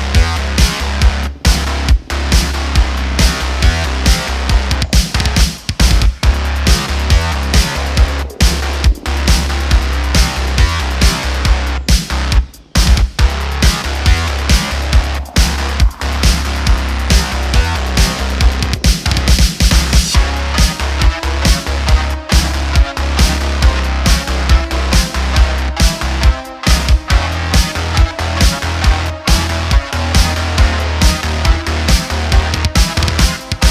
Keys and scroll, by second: 1.0 q, 17.9 shift+d, 18.3 y, 18.4 y, 24.2 shift+a, 25.7 s, 26.6 Tab, 29.2 s.